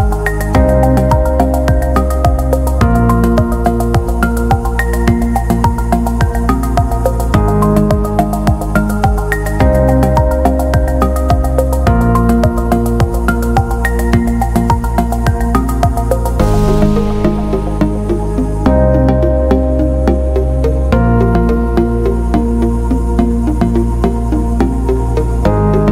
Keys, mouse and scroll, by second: 0.0-1.2 drag, 2.5-6.2 drag, 8.6-9.2 scroll up 4, 9.7 middle click, 9.7-10.0 scroll up 1, 10.4 scroll down 2, 11.0 scroll up 2, 12.3-14.4 drag, 14.7 click, 16.6-21.4 drag, 23.6 click, 24.0 right click.